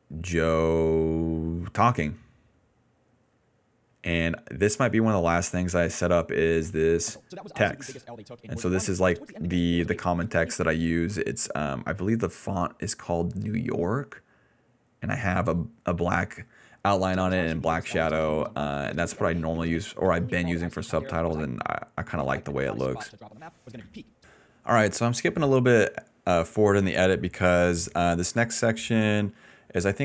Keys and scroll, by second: 0.1 d, 0.3 d, 1.5-3.8 typing, 6.1-10.5 typing, 13.5 s, 16.1 ctrl+s, 16.7 d, 16.9 space, 17.5 d, 18.8-22.9 typing, 24.2 space.